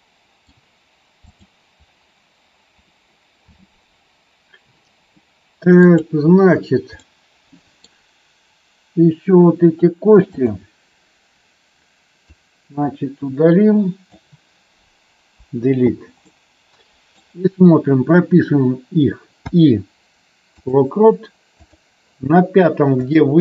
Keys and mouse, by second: 1.2 click, 5.9 click, 7.0 middle click, 12.2-14.1 drag, 16.2-17.0 middle drag, 19.2 i, 21.5 click, 23.0 click.